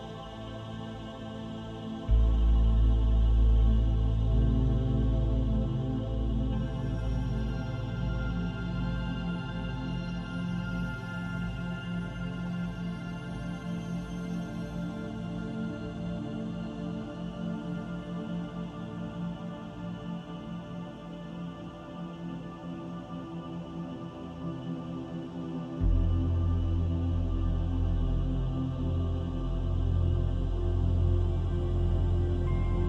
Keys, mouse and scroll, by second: 1.3 click, 3.2 click, 4.6 scroll up 1, 4.9 shift+middle click, 8.1 ctrl+s.